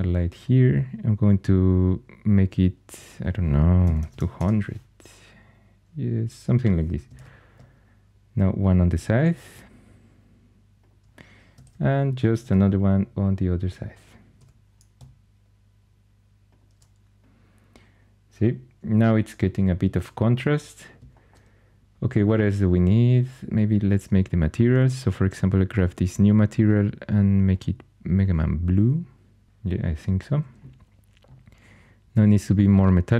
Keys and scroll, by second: 3.5-4.5 typing, 7.0 shift+d, 9.0 r, 12.3 shift+d, 14.2 r.